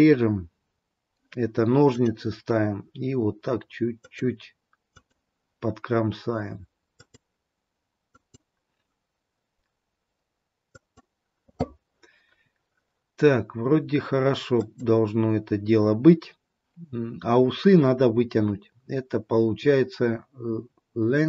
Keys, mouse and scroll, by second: 1.8 click, 4.1 click, 7.1 click, 8.2 click, 14.7 click.